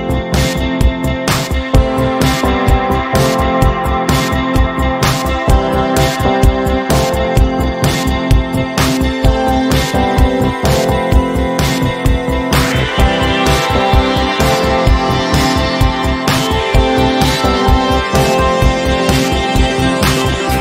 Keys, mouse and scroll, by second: 6.0 z, 7.3 h, 7.8 space, 8.1 click, 8.3-8.7 space, 9.1-10.1 drag, 10.1 v, 13.2 z, 14.4-18.1 typing, 15.9 click, 18.5-20.6 drag.